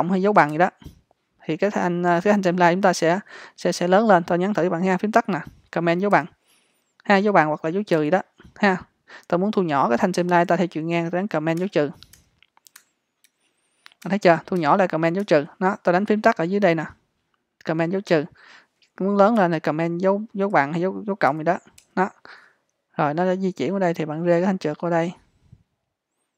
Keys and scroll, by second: 0.6 super+=, 11.6 super+-, 19.4 super+=.